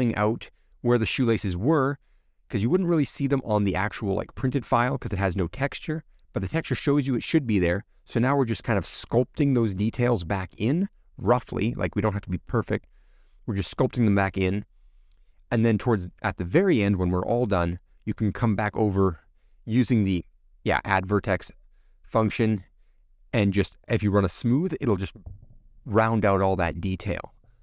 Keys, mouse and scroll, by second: 1.3 scroll down 2, 1.5 middle click, 2.6 middle click, 2.7-3.4 scroll up 2, 3.4 scroll up 1, 3.6 shift+middle click, 3.9-4.6 scroll up 1, 6.7 middle click, 7.5 middle click, 7.9-8.4 scroll down 4, 8.5-10.0 middle drag, 11.9-13.1 middle drag, 13.9-14.9 scroll up 7, 16.5 middle click, 20.2 ctrl+click, 20.8 middle click, 21.7 ctrl+click, 25.0-26.1 middle drag, 26.6-27.0 scroll down 4, 27.0 middle click, 27.4 scroll down 3.